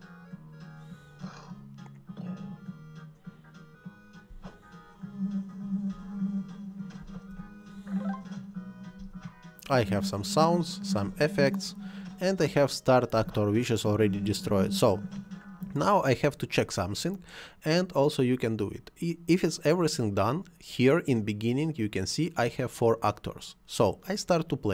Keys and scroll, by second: 4.3 space, 7.0 space, 9.0 space, 13.1 space.